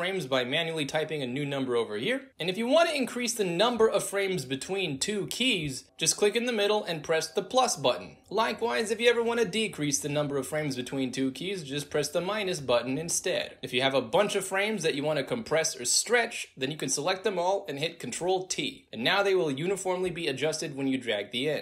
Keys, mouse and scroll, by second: 0.1 click, 1.1 ctrl+a, 5.1 click, 9.5 ctrl+z, 11.9 z, 13.4 ctrl+y, 13.8 ctrl+z, 14.4 click, 15.0-17.0 drag, 18.3 ctrl+t, 18.8-19.6 drag, 20.3-21.6 drag.